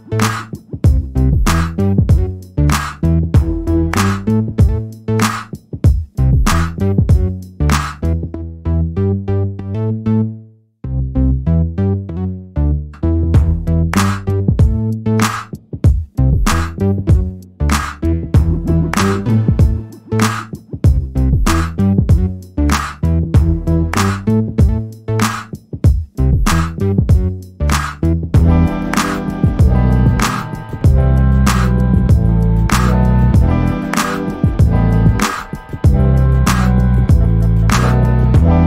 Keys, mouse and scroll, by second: 6.5 click, 7.5 click, 8.3 click, 9.3 click, 10.9-14.2 ctrl+drag, 14.8 click, 16.2 ctrl+shift+click, 20.4 click, 21.5-23.0 drag, 24.2 click, 26.4 click, 28.1 click, 28.8 click, 29.7 click, 30.5 click, 33.2 ctrl+click, 34.1 ctrl+click, 35.3-36.9 ctrl+drag, 37.1-38.6 ctrl+drag.